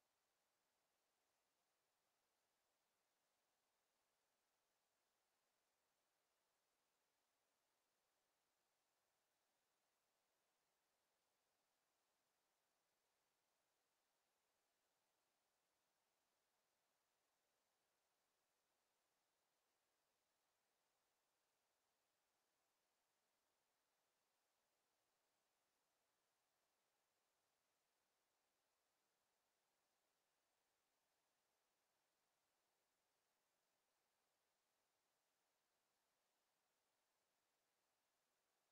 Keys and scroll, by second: 10.9 ctrl+z, 18.9 ctrl+z.